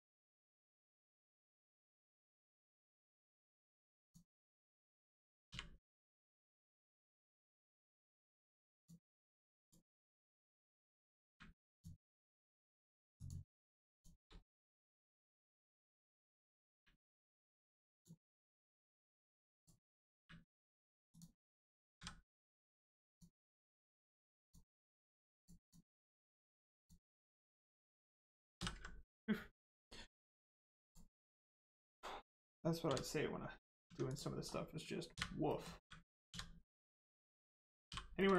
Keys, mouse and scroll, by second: 1.4-2.0 scroll up 1, 2.0 click, 2.5-2.8 scroll down 1, 4.0 click, 5.4 u, 6.6 click, 8.7 click, 11.2 u, 11.7 click, 13.1 shift+click, 13.9 shift+click, 14.4 middle click, 15.3-15.7 scroll down 1, 15.7 middle click, 16.7 u, 17.9 click, 20.1 u, 21.1 click, 24.3 click, 26.7 click, 28.5 ctrl+s, 30.8 click, 31.5 middle click, 33.8 Tab, 34.0 click, 34.4-35.1 scroll down 1, 35.4 middle click, 37.8 h, 38.1 middle click.